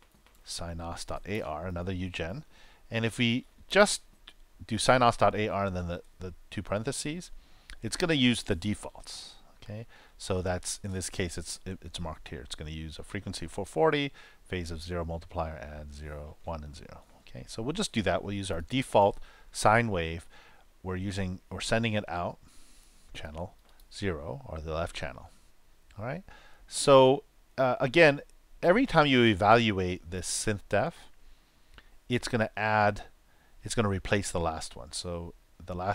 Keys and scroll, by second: 0.0-0.5 typing, 2.2-3.6 typing.